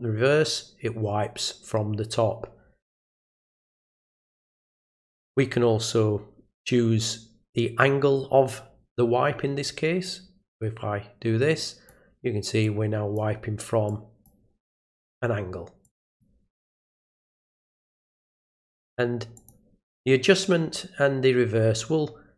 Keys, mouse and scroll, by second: 10.0-11.9 drag, 12.6 click, 13.9 click, 15.8 click, 17.9 click, 19.4 click.